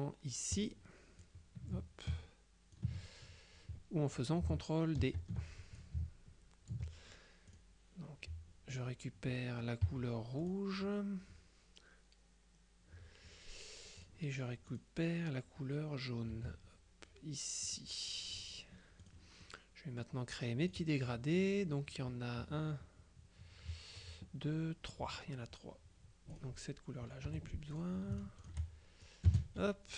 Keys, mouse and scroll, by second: 0.6 click, 1.8-3.3 ctrl+drag, 5.1 ctrl+d, 5.9 ctrl+click, 7.6 click, 9.9 F7, 10.5 click, 14.1 click, 14.8 click, 16.4 F7, 17.7 click, 19.1 click, 20.7 click, 26.4 click, 27.4 Delete, 27.8-29.0 drag, 29.1-29.9 shift+drag, 29.4 space.